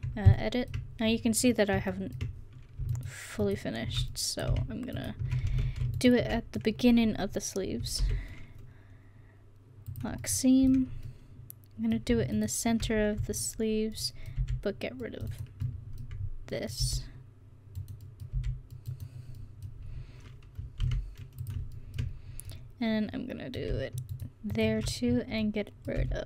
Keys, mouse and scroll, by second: 5.6 ctrl+z, 8.1 ctrl+e, 14.4 c, 16.8 c, 18.4 c, 24.5 right click, 25.5 middle click, 26.1 c.